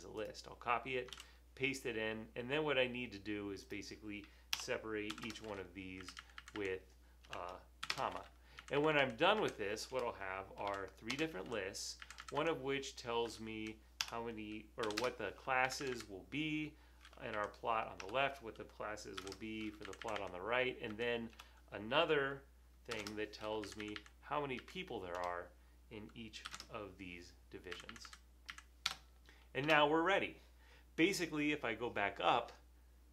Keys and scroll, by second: 1.4 super+v, 4.7 BackSpace, 5.1 ,, 6.0 Right, 6.2 Right, 6.4 Right, 6.6 Right, 7.3 BackSpace, 7.9 ,, 8.6 Right, 9.4 Right, 10.0 BackSpace, 10.7 ,, 12.1 Right, 13.6 Right, 14.1 BackSpace, 14.9 ,, 15.7 Right, 17.4 Right, 18.0 BackSpace, 19.2 ,, 19.9 Right, 20.9 Right, 21.4 BackSpace, 23.2 ,, 23.7 Right, 25.2 BackSpace, 26.5 ,, 27.8 Right, 27.8 space, 27.9 Right, 28.1 Right, 28.5 Right, 28.9 Return, 29.7 Return.